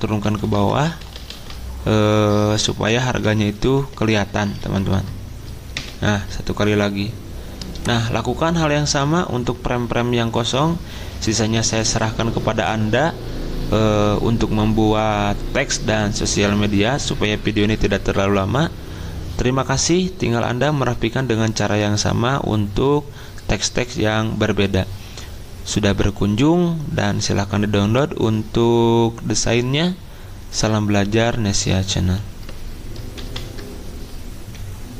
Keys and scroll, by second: 0.1 ctrl+Page_Down, 0.3 ctrl+Page_Down, 0.5 ctrl+Page_Down, 0.6 ctrl+Page_Down, 0.7 ctrl+Page_Down, 2.9 ctrl+Page_Up, 5.8 ctrl+Page_Down, 33.2 ctrl+End.